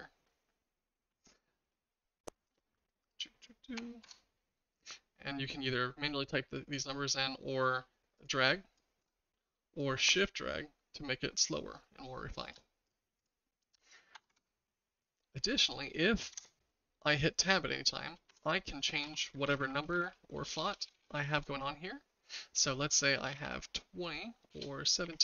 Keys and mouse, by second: 3.1-4.5 drag, 8.2-9.2 drag, 9.8-12.5 shift+drag, 12.9 click, 13.3-14.7 drag, 16.3 Tab, 18.3-21.4 typing, 23.2 BackSpace, 23.3 2, 23.4 0, 24.5-25.1 typing.